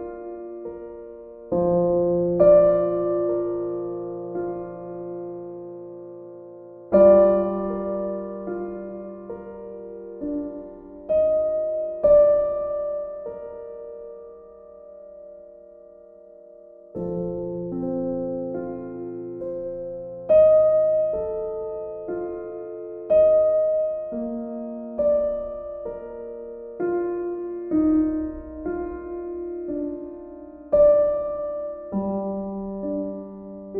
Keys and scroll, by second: 6.7-8.0 typing, 16.0 b.